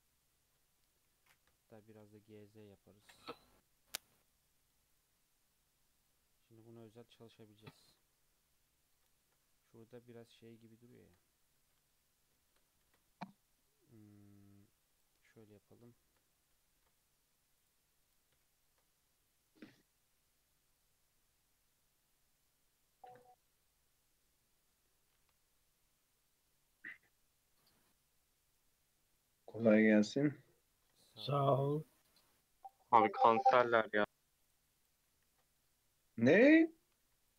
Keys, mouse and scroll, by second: 1.8 g, 4.2 click, 4.4-4.9 middle drag, 4.9 click, 5.5 Tab, 5.7 Tab, 6.0 click, 6.5 Tab, 6.9 Tab, 7.1 click, 7.6 Tab, 8.4-11.2 middle drag, 11.2 Tab, 11.4 Tab, 11.8 alt+z, 12.4 shift+middle click, 12.8 ctrl+r, 15.2 3, 15.9-16.3 shift+middle drag, 16.3 scroll up 1, 16.7 ctrl+r, 18.7 ctrl+b, 23.5 scroll down 1, 23.6-24.7 middle drag, 24.7 scroll up 1, 25.1 alt+e, 30.3 middle click, 31.1 ctrl+r, 33.0 ctrl+z, 33.7 ctrl+r, 35.4 ctrl+b, 37.0 alt+e.